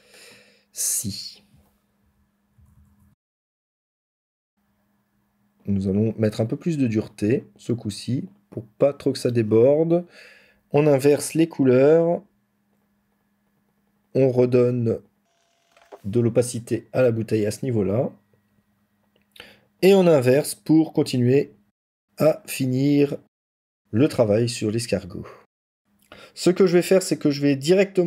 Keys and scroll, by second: 1.9 ctrl+-, 2.5 ctrl+=, 2.6 ctrl++, 25.6 ctrl+-, 25.6 ctrl+-, 25.7 ctrl+-, 25.7 ctrl+-.